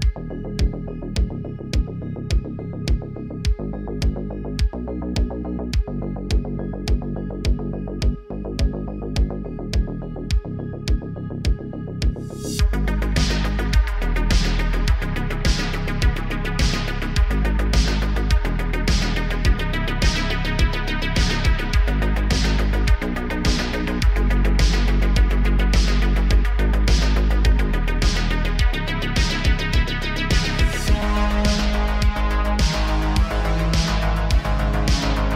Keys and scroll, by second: 5.7 Tab, 10.4 Tab, 12.4 2, 13.4 s, 13.9 shift+z, 17.3 s, 17.8 shift+z, 19.6 s, 19.9 shift+z, 20.6 Tab, 21.8 Tab, 22.4 2, 23.4 ctrl+b, 24.9 Tab, 29.2 Tab, 29.7 2, 30.3 s, 30.6 shift+z, 31.9 2, 32.3 Tab, 33.1 Tab, 33.5 s, 33.9 shift+z, 35.2 Tab.